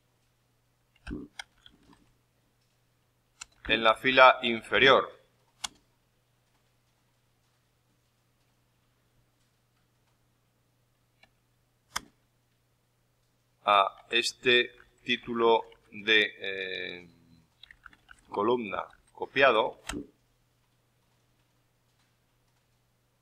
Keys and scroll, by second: 0.8-2.3 typing.